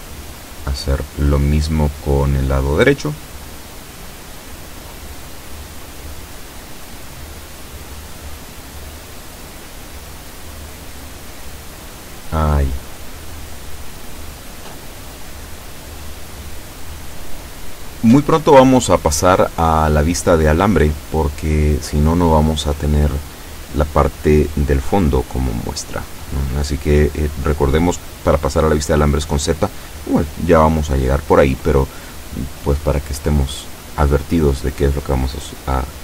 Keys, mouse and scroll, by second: 0.3 b, 1.5-3.6 drag, 4.5-8.9 drag.